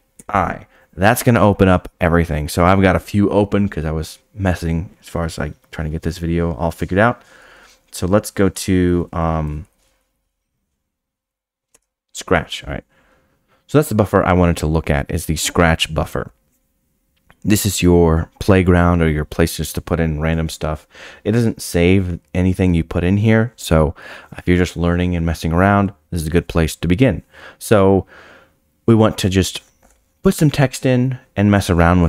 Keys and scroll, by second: 11.7 Return.